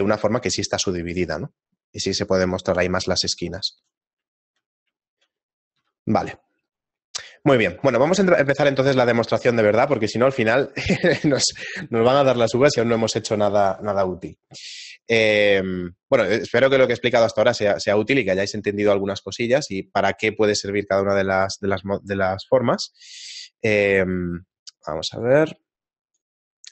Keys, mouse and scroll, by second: 0.0 shift+middle click, 4.1 middle click, 4.5 shift+middle click, 4.8 middle click, 5.2 shift+middle click, 5.5 right click, 5.8 x, 7.0 middle click, 7.2 middle click, 7.7 shift+middle click.